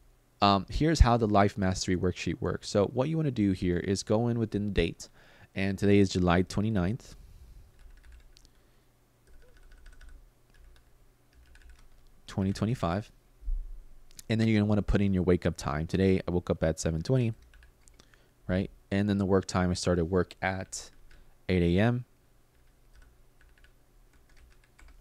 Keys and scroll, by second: 5.8-12.9 typing, 15.7-17.7 typing, 20.3 8, 20.7 shift+;, 22.2-24.7 typing.